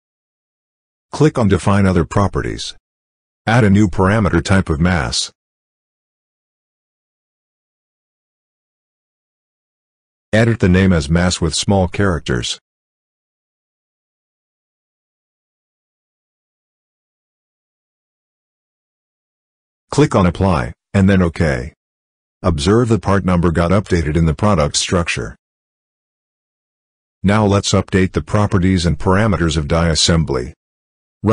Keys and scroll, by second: 11.1 m, 12.2 BackSpace, 13.4 m, 13.9 a.